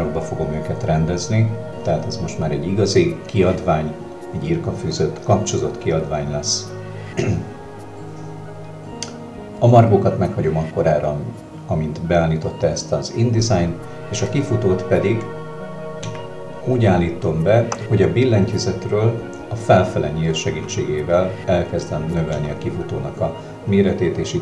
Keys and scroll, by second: 16.1 Up, 20.6 Up.